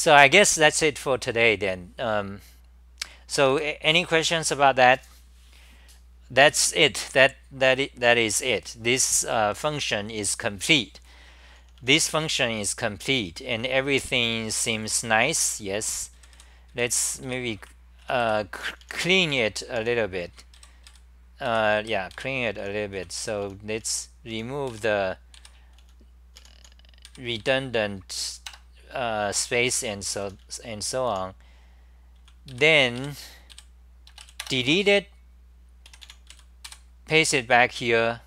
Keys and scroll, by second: 11.6-12.5 typing, 15.1-19.1 typing, 20.3-27.4 typing, 28.5 Tab, 29.7 d, 30.2 t, 30.4 t, 31.1 n, 32.2 c, 32.5 ,, 34.4 ,, 35.6-37.2 typing.